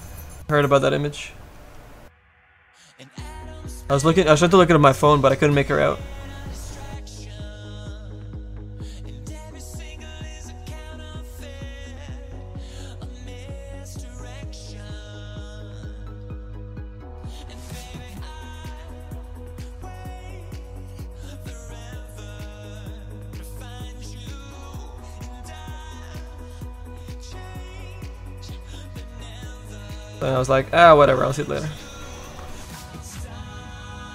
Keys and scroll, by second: 9.2 s, 17.8 s.